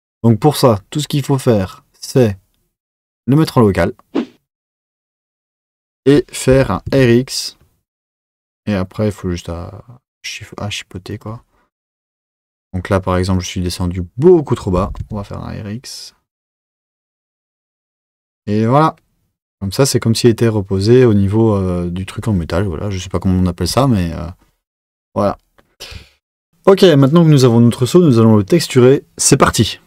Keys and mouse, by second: 1.6-4.7 drag, 5.4 click, 6.5 r, 14.7 r, 26.0 Tab.